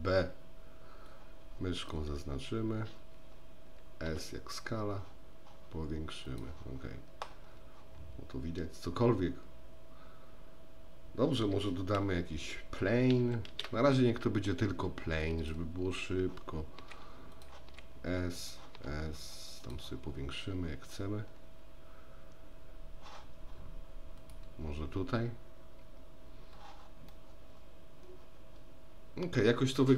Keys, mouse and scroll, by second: 4.1 s, 13.5 shift+a, 16.8 s, 17.7 s, 18.9 s, 27.1-29.4 middle drag.